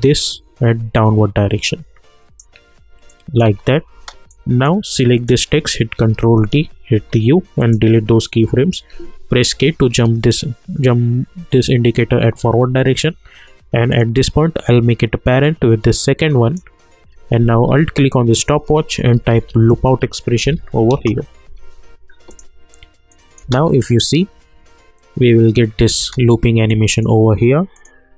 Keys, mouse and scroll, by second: 3.4 space, 4.3 click, 6.0 ctrl+d, 7.0 u, 7.6 click, 9.5 k, 13.9-18.0 drag, 18.0 alt+click, 18.9-20.1 typing, 20.4 Down, 20.9 Return, 22.3 click, 23.4 space, 26.0 space, 26.7 click.